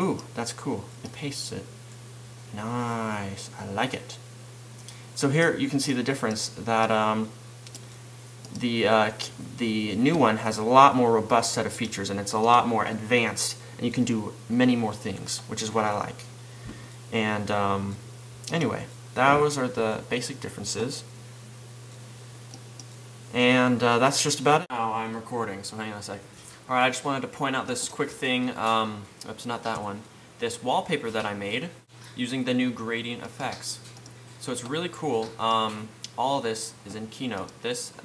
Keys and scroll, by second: 30.2 fn+Right.